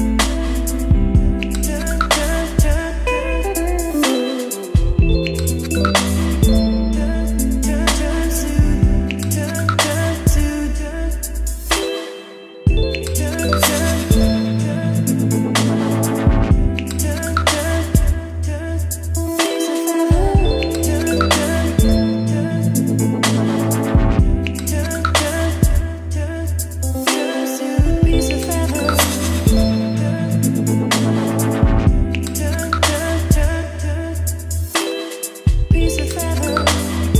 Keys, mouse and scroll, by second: 1.2-4.2 typing, 4.7 Right, 4.9 Return, 5.9-14.4 typing, 9.2 Return, 9.3 ctrl+z, 9.6 Return, 15.0-15.3 scroll, 15.3 click, 15.6 Return, 16.0-29.5 typing, 17.2 ctrl+z, 22.7 Down, 22.9 Return, 23.2 Return, 31.5 middle click, 31.8 ctrl+s, 32.1 click, 32.8 ctrl+s, 33.1 middle click, 33.6 click, 34.2 ctrl+x, 35.4 click, 35.7 Return, 36.0 ctrl+v, 36.6 ctrl+s.